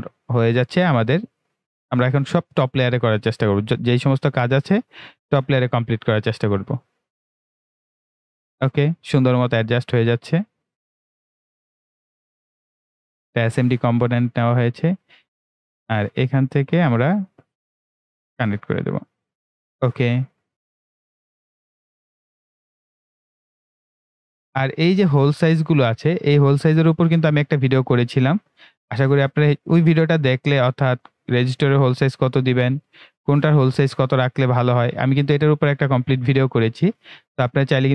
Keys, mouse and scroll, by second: 1.5 click, 6.2 click, 12.3 click, 14.6-16.6 right drag, 16.6 click, 23.5 right click, 24.5-25.2 scroll down 1, 25.2-28.1 right drag, 28.1 click, 33.7 click, 35.1-37.9 right drag.